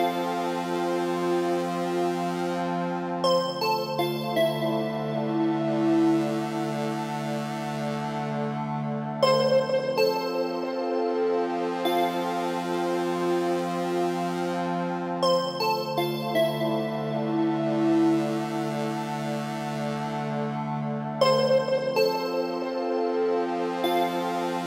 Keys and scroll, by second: 23.1 Return.